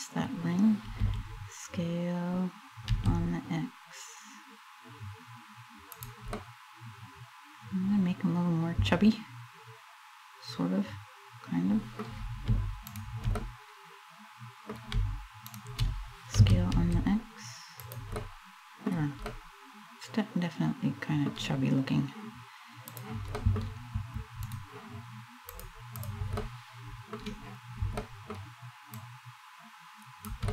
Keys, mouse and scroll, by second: 0.6 s, 5.7 click, 6.0 middle click, 12.5 shift+right click, 13.0 middle click, 15.1 shift+right click, 16.0 s, 17.5 click, 17.8 middle click, 18.6-18.9 scroll down 2, 18.9 middle click, 21.6 scroll up 1, 22.5 click, 23.0 middle click, 24.1 right click, 25.2 click, 26.0 middle click, 27.6 middle click, 28.6 click, 30.1 middle click.